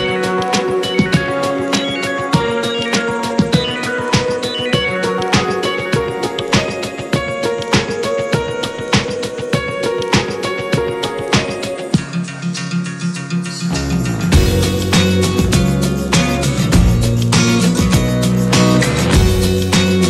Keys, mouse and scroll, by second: 0.5 click, 1.3-1.7 middle drag, 1.7 click, 1.9 `, 2.8 Tab, 3.2-4.5 middle drag, 4.5 click, 5.1-7.2 middle drag, 7.2 f, 8.2 g, 9.5 ctrl+z, 9.8 Tab, 9.9 drag, 10.1-10.4 scroll down 3, 10.4-11.2 middle drag, 11.2 scroll up 1, 11.3-11.8 scroll down 3, 11.8 click, 12.4 Delete, 12.9 click, 13.2 Delete, 13.3 click, 13.5-13.9 scroll down 3, 13.9-14.4 shift+middle drag, 14.4 n, 14.6 drag, 15.1-15.9 shift+middle drag, 15.9 n, 17.0-18.9 drag.